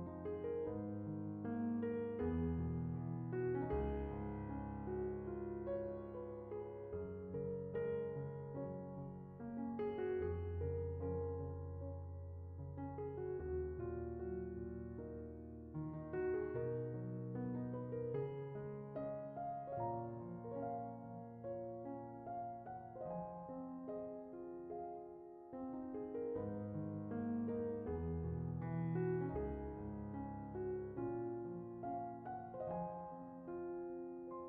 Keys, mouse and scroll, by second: 0.0 click, 0.6 n, 0.8 click, 2.1-2.8 shift+drag, 4.1 x, 5.1-6.2 middle drag, 6.2 click, 6.6 middle click, 7.0 scroll up 3, 7.2-8.3 middle drag, 9.2-10.4 middle drag, 10.5 right click, 10.8 middle click, 11.7 right click, 12.1-13.9 middle drag, 13.9 click, 19.7 right drag, 20.0-20.4 drag, 23.6-24.1 shift+middle drag, 24.9 click, 25.1 middle click, 27.1 click, 27.5 click, 28.4 click, 28.7 g, 30.0 click, 30.2 middle click, 30.4 Tab, 30.7 Tab, 30.9 middle click, 32.0 click, 32.5 g, 33.1 g.